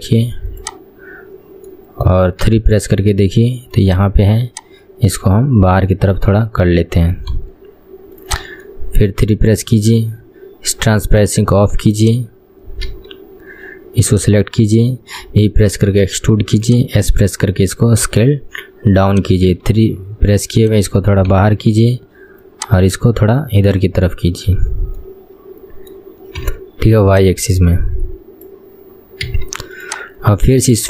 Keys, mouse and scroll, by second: 0.8 click, 1.8 middle click, 2.6 KP_3, 2.9-4.1 scroll up 2, 4.1 click, 4.5 click, 6.0-7.5 middle drag, 7.5 KP_1, 8.4 click, 8.8-11.2 middle drag, 11.2 click, 13.0 KP_3, 13.6-14.2 scroll up 4, 14.2 click, 14.8-15.4 scroll down 2, 15.4 e, 17.2 s, 19.7 KP_3, 20.7 click, 21.4 KP_1, 22.6 click, 25.1-26.6 middle drag, 26.6 KP_1, 27.2 click, 29.4 KP_3, 30.0 click.